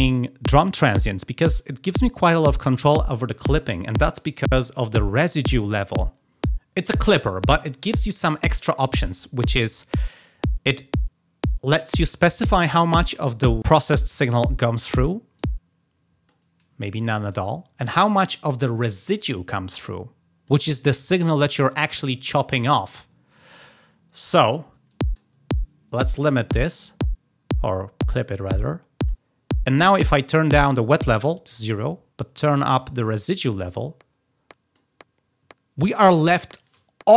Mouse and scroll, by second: 15.3-16.3 drag, 19.2-20.4 drag, 24.0-24.4 drag, 24.8 click, 25.8 click, 30.6-31.7 drag, 33.1-34.6 drag.